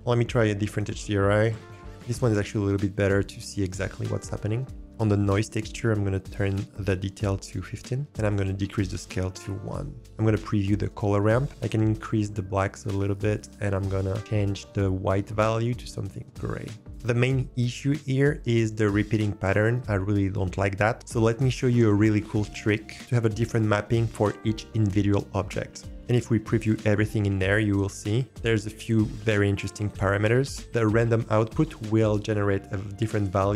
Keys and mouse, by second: 0.8-1.8 drag, 2.5 shift+click, 2.6 shift+middle click, 2.6 shift+click, 2.8 shift+middle click, 2.8 shift+click, 3.0 shift+middle click, 7.2 click, 8.0 g, 8.3 click, 13.0 click, 16.9 ctrl+s, 27.0 ctrl+shift+click, 30.5 ctrl+shift+click.